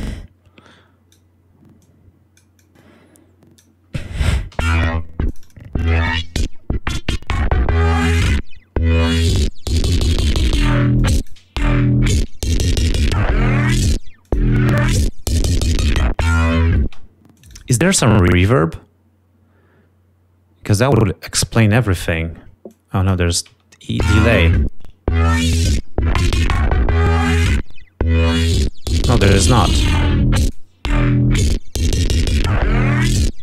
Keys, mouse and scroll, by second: 1.8-3.1 drag, 3.4 click, 5.1 l, 5.8 click, 7.4-9.5 drag, 11.1 click, 14.4 click, 16.9 space, 17.4 click, 22.6 click, 23.9 l, 28.0 click, 28.7-30.3 drag.